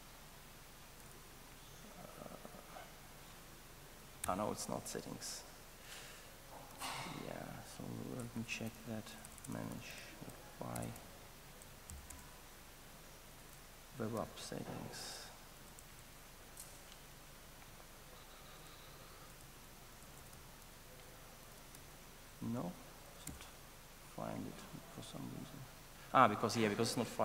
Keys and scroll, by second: 4.2 alt+BackSpace, 6.7 ctrl+shift+super+o, 14.2 ctrl+shift+super+o, 23.1 alt+F1.